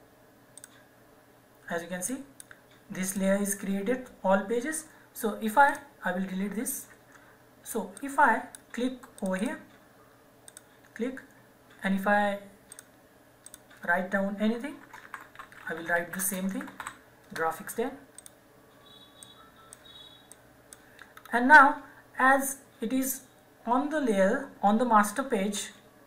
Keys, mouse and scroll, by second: 5.7 click, 6.8 Delete, 7.9 click, 13.5 click, 14.8-17.3 typing, 18.2 click, 21.1-21.7 scroll up 1.